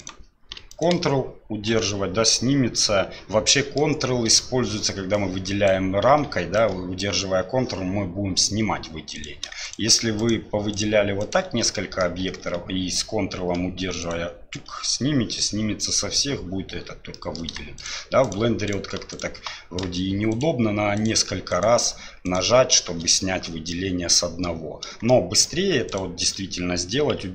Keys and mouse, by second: 0.0 shift+click, 0.7 ctrl+click, 3.5 middle click, 5.1-5.7 drag, 6.6-7.0 ctrl+drag, 9.1 click, 9.6 shift+click, 10.2 shift+click, 10.7 shift+right click, 11.2 shift+right click, 11.7 middle click, 14.0 ctrl+right click, 17.1 middle click, 17.8-19.2 shift+middle drag, 20.3 shift+right click, 21.0 shift+right click, 22.2 shift+right click, 23.7-24.4 middle drag, 25.1-25.5 shift+middle drag, 25.9 shift+right click.